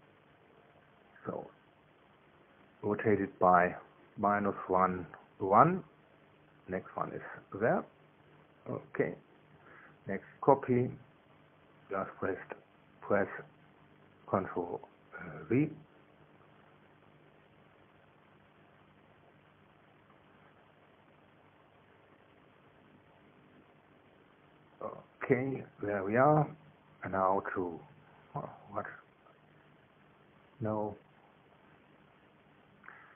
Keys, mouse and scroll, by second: 4.2 KP_Subtract, 4.6 KP_1, 5.0 Tab, 5.4 KP_1, 5.8 Tab, 12.0 ctrl+v, 15.0 click, 19.1 click, 21.3 click, 22.6 ctrl+v, 23.5 click, 24.6 click, 29.2 click, 30.6 KP_Subtract, 31.0 KP_1, 31.4 Tab, 32.3 KP_Subtract, 32.8 KP_1.